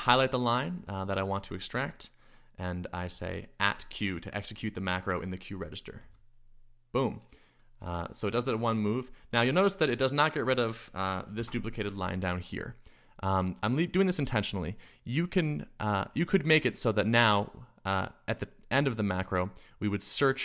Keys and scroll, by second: 0.0-0.3 typing, 3.7 shift+2, 5.7-6.4 typing, 10.6-11.8 typing.